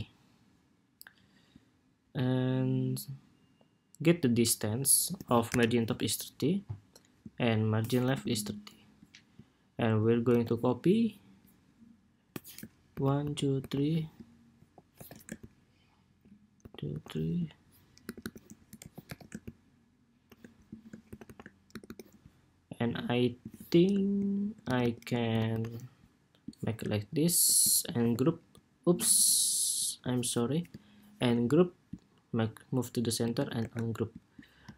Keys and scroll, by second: 5.2 super+=, 7.9 alt+Right, 9.7 super+c, 10.0 super+v, 14.3 super+c, 14.7 super+v, 17.8 alt+Right, 18.0 alt+Right, 18.5 super+c, 18.8 super+v, 20.8 alt+shift+Left, 21.0 alt+shift+Left, 21.4 alt+Right, 21.6 alt+Right, 24.4 alt+shift+Right, 25.0 alt+Left, 25.3 alt+Left, 27.7 super+h, 30.9 super+g, 33.3 shift+super+g, 34.5 super+s.